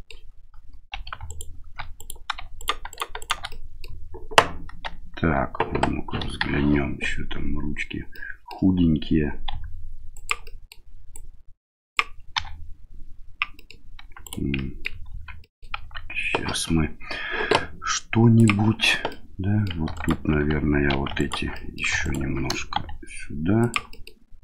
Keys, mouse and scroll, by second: 0.9 3, 1.2 alt+right click, 1.9 right click, 2.5 right click, 2.9 right click, 3.2 right click, 3.5 middle click, 6.2 KP_1, 8.1 middle click, 9.5 s, 10.5 middle click, 11.2 click, 12.3 e, 14.6 middle click, 15.1 ctrl+z, 15.4 middle click, 18.3 click, 19.1 middle click, 19.9 alt+right click, 20.9 2, 21.1 alt+right click, 21.5 middle click, 22.0 alt+right click, 22.7 s, 23.9 middle click.